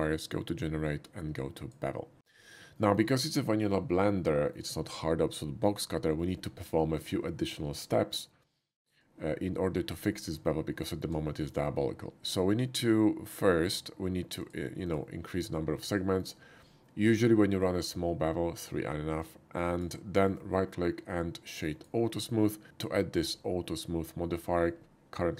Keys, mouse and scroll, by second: 1.5 click, 2.8 shift+middle drag, 4.2-4.5 shift+middle drag, 8.7 shift+middle click, 10.1 shift+middle click, 10.5 middle click, 11.1 middle click, 11.5-14.4 middle drag, 14.4 click, 14.5 middle click, 14.9 click, 15.9 shift+middle click, 17.6-19.8 shift+drag, 20.2 shift+right click, 21.7 shift+click.